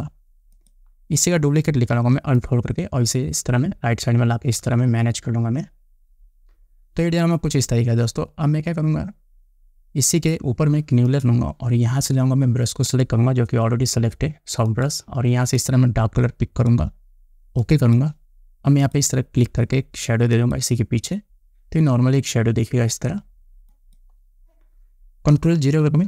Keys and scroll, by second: 0.2 Return.